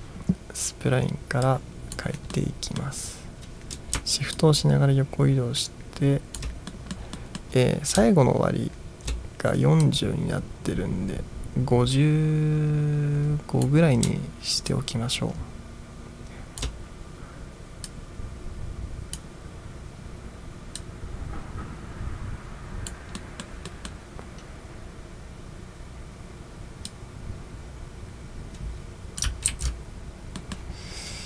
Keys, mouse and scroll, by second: 1.5 click, 2.4-3.0 middle drag, 4.4-6.4 shift+drag, 6.8-7.2 middle drag, 7.2-7.6 middle drag, 9.9-13.7 drag, 14.7-16.7 shift+drag, 18.0-19.5 drag, 20.8-23.1 drag, 23.2 middle drag, 23.8 middle drag, 26.9-29.3 drag, 29.6 ctrl+z, 30.5 middle drag.